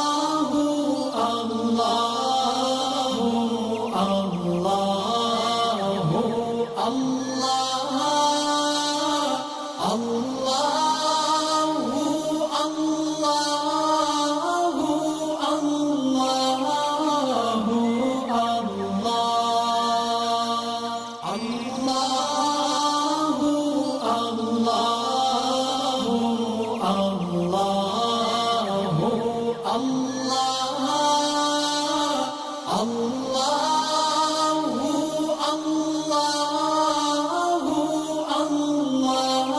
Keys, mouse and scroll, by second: 3.5 space, 3.7 click, 9.7 shift+click, 10.4 shift+m, 11.7 alt+click, 13.0 click, 15.1 ctrl+z, 16.7 ctrl+shift+z, 17.1 ctrl+shift+x, 17.2 click, 19.0 shift+click, 19.6 ctrl+shift+[, 20.6 click, 21.3 ctrl+shift+[, 22.0-26.1 drag, 29.0 alt+scroll down 1, 29.8 alt+scroll up 1, 30.7 click, 31.9-32.9 alt+scroll down 2, 32.9 click, 33.8-34.2 scroll up 3, 34.3 space, 34.4-35.8 drag, 35.8 space, 36.2 alt+scroll down 1, 37.2-37.5 alt+scroll up 1, 38.0 alt+click, 38.9 ctrl+z.